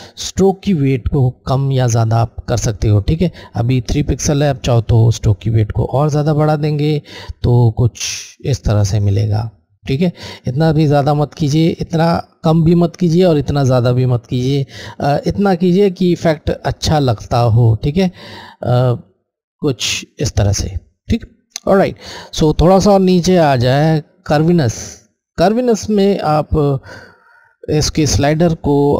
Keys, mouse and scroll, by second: 4.3 click, 4.5 click, 10.4 click, 14.7 click.